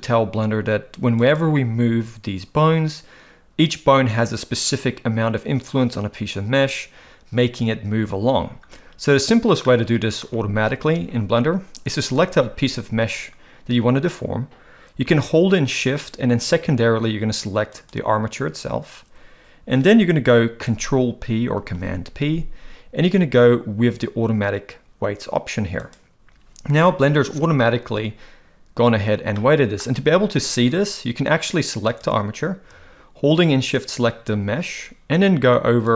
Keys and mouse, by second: 1.2 click, 9.6-10.2 middle drag, 12.3-13.7 drag, 21.6 ctrl+p, 29.4-29.8 middle drag, 33.8 shift+click.